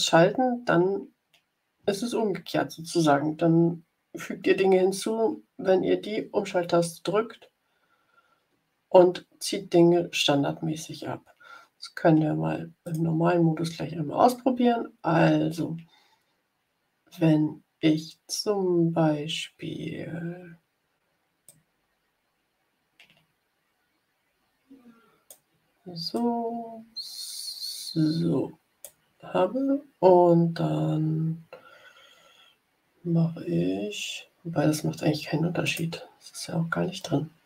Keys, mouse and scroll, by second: 12.8 click, 21.4-25.4 drag, 26.0-28.9 drag, 35.5 shift+click.